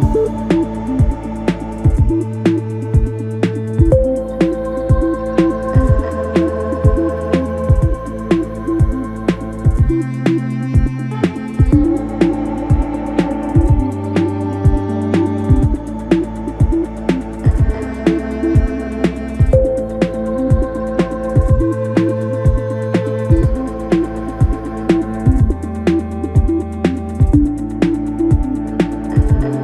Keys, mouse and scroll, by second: 0.9 shift+click, 1.5 shift+click, 2.5 shift+click, 4.0 shift+click, 6.3-8.3 shift+drag, 8.3-9.8 middle drag, 9.8 shift+click, 11.4 shift+click, 11.8 middle click, 12.5 shift+click, 13.2 shift+click, 14.0 shift+click, 14.4-16.0 middle drag, 16.0 shift+click, 16.9 shift+click, 17.6 shift+click, 18.3 shift+click, 18.7-20.2 middle drag, 20.2 KP_1, 21.2 shift+d, 22.8 p, 23.6 Tab, 24.8 click, 26.9 click, 28.5 click.